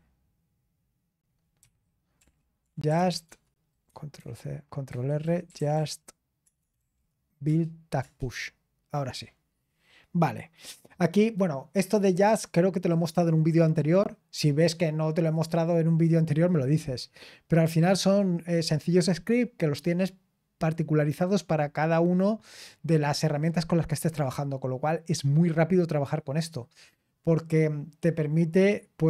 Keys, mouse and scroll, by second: 2.6 ctrl+c, 3.1 typing, 4.9-5.7 typing, 7.4 ctrl+c.